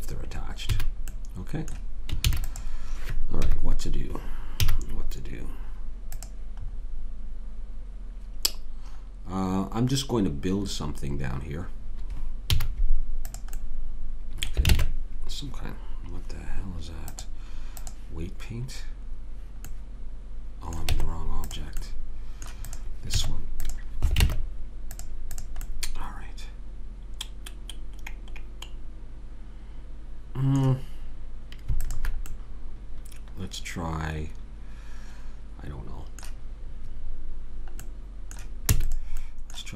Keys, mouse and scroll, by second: 0.7 a, 2.3 ctrl+s, 3.4 KP_3, 4.6 z, 12.5 z, 14.8 ctrl+Tab, 17.9 click, 19.7 middle click, 20.9 Tab, 23.2 Tab, 24.2 ctrl+Tab, 26.1 middle click, 31.8 click, 32.3-34.6 middle drag, 37.9-39.4 middle drag, 38.7 e.